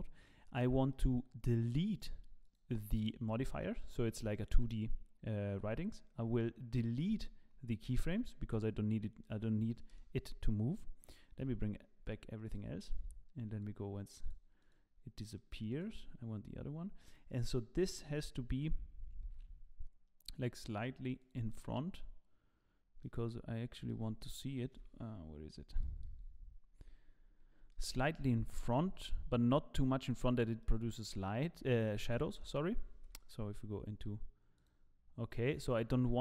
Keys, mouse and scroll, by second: 0.9 middle click, 1.9 click, 2.4 click, 3.0 click, 3.3 middle click, 4.0 middle click, 4.6 click, 7.1 a, 7.8 x, 9.2 middle click, 9.9 KP_0, 11.4 KP_Divide, 12.4 click, 13.6 click, 14.6 click, 15.3 middle click, 15.7 click, 16.5-17.1 scroll up 7, 17.1 middle click, 17.5 shift+middle click, 18.7 g, 21.5 middle click, 23.9 middle click, 24.7 KP_7, 25.4-25.8 scroll up 5, 25.8 shift+middle click, 26.2-26.8 scroll down 2, 26.8 z, 27.4 scroll up 1, 27.7 shift+middle click, 28.3 g, 30.3-30.7 scroll down 6, 30.6 middle click, 31.7 z, 32.0 scroll down 2, 32.1 middle click, 33.2 KP_0, 33.8 z, 34.6 click, 35.6 click.